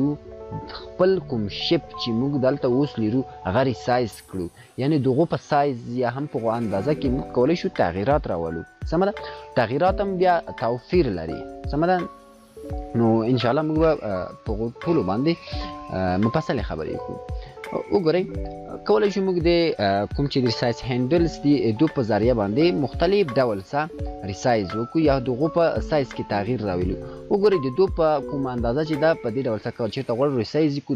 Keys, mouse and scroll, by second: 17.4-18.4 click, 22.4-23.7 drag.